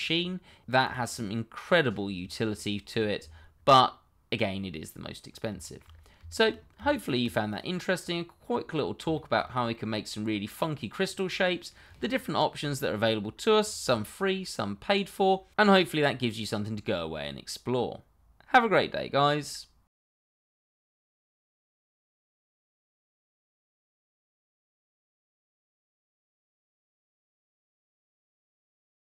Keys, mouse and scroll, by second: 2.3 middle click, 3.2 shift+middle click, 3.4 middle click, 3.7 shift+middle click, 3.8-4.1 scroll down 1, 4.3 middle click, 5.9-6.3 scroll up 1, 6.3 shift+middle click, 6.7 Tab, 7.5 click, 8.0-9.0 scroll up 1, 9.1 shift+middle click, 9.2 middle click, 9.3 shift+middle click, 9.7 middle click, 14.6-16.6 scroll up 1.